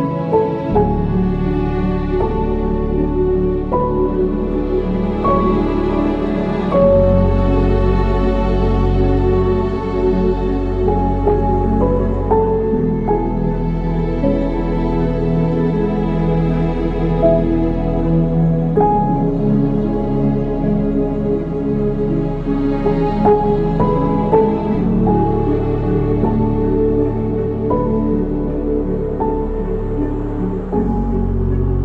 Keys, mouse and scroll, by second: 1.6-3.9 drag, 5.9-6.3 drag, 6.3-7.2 scroll down 5, 7.2-9.3 drag, 9.3-10.0 scroll up 2, 10.0-11.3 drag, 12.2 click, 12.5-13.5 drag, 14.2 click, 16.8-21.7 drag, 22.8-23.4 drag, 23.4 middle click, 23.8-25.1 scroll up 7, 25.1-26.8 middle drag, 26.8-29.8 drag.